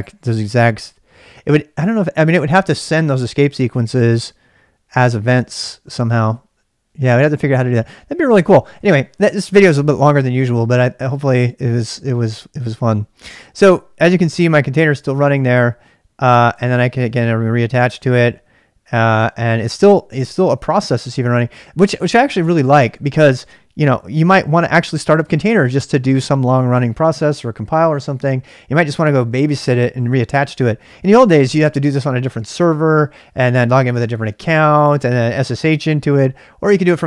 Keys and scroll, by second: 16.5 ctrl+[, 16.7 k, 17.0 k, 17.9 Return.